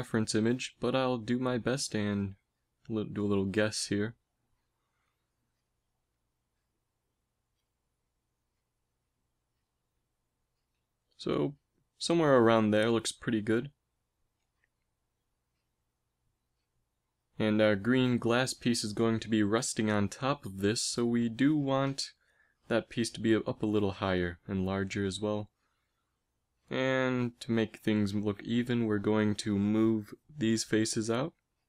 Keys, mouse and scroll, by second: 0.3 ctrl+s, 6.3 middle click, 7.0 middle click, 7.8 g, 10.1 KP_1, 10.5 z, 11.6 g, 13.8 s, 15.4 g, 16.7 z, 17.0 z, 17.2 a, 17.4 b, 18.7 g, 22.8 z, 25.1 ctrl+Tab, 31.4 g.